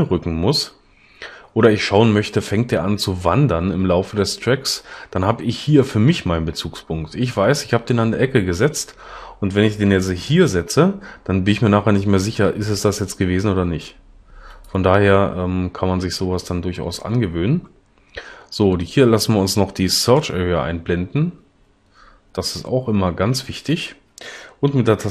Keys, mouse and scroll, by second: 10.1 g.